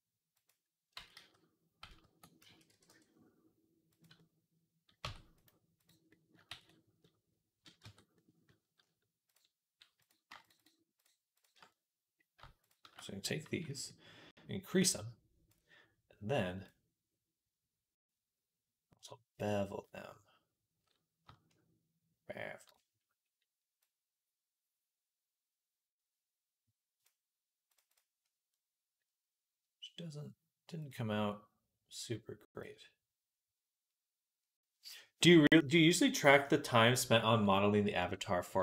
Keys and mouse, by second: 0.8 ctrl+z, 1.0 ctrl+z, 1.7 ctrl+z, 2.2 a, 2.5 e, 4.0 click, 4.2 click, 4.9 Tab, 5.9 click, 6.0-28.6 ctrl+right drag, 6.4 ctrl+s, 7.6 Tab, 9.1 click, 9.1 middle click, 10.4 alt+shift+click, 10.4 alt+shift+middle click, 12.5 alt+shift+click, 12.5 alt+shift+middle click, 13.3 n, 14.7-28.6 drag, 14.7-28.6 middle drag, 28.9-38.6 drag, 28.9-38.6 middle drag, 28.9-38.6 right drag.